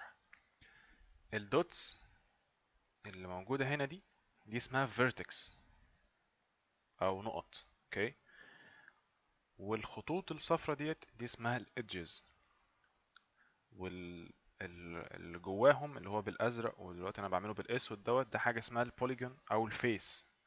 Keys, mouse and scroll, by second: 2.7 click, 6.8 click, 15.1 click.